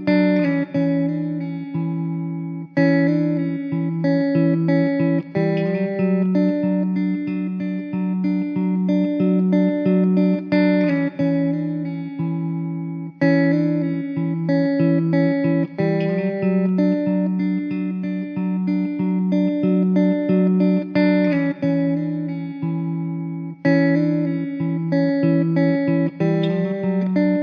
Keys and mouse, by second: 15.0 middle click, 16.9 middle click, 22.5-23.1 typing.